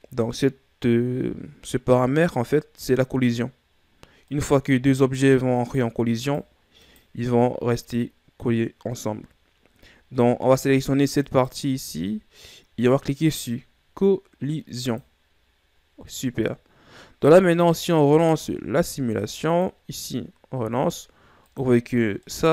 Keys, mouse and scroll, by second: 4.9 right click, 5.6 right click, 6.2 right click, 6.8 right click, 7.4 right click, 11.9 right click, 15.5 click, 20.1 click.